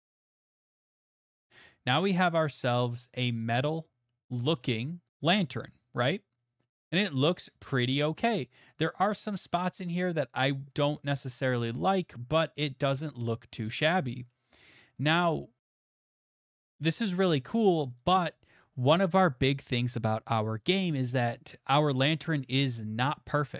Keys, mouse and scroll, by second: 1.6 click, 3.4 click, 4.1 middle click, 4.2 middle click, 4.2 middle click, 4.6 shift+middle click, 5.3 middle click, 5.4 middle click, 5.4 middle click, 5.5 middle click, 6.6 middle click, 7.4 middle click, 7.6 middle click, 7.6 middle click, 8.0 shift+middle click, 14.3-17.6 middle drag, 18.1 middle click, 20.4 click, 22.3 middle click.